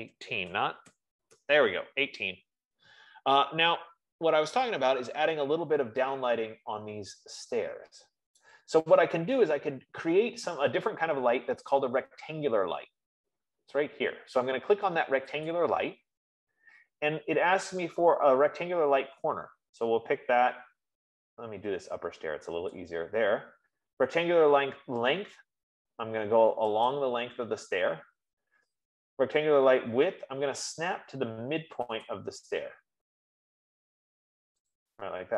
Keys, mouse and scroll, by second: 0.0-1.7 typing, 0.1-2.9 drag, 5.0-8.7 middle drag, 8.7-13.7 right drag, 14.4 F15, 16.1-21.0 drag, 23.8-32.0 drag.